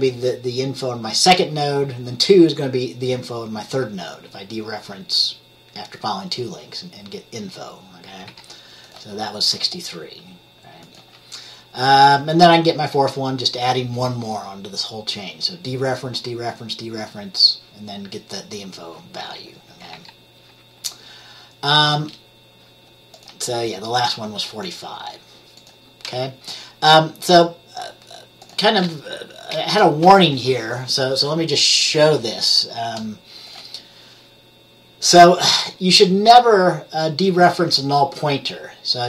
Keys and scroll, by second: 8.4 F10, 20.0 F10, 29.6 BackSpace, 29.8 BackSpace.